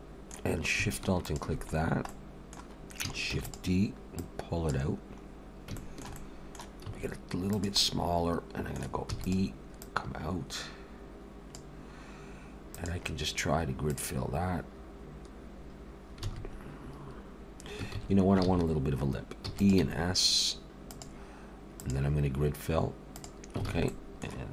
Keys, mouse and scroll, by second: 1.2 alt+shift+click, 1.9 scroll down 1, 2.1 middle click, 3.3 shift+d, 4.2 click, 5.2 scroll up 2, 5.8 shift+middle click, 6.1 middle click, 6.8 s, 7.8 middle click, 9.1 e, 9.8 click, 12.7 click, 16.3 alt+a, 18.0 ctrl+z, 18.4 ctrl+z, 19.5 e, 19.8 s, 21.8 click, 23.7 alt+a, 23.9 middle click.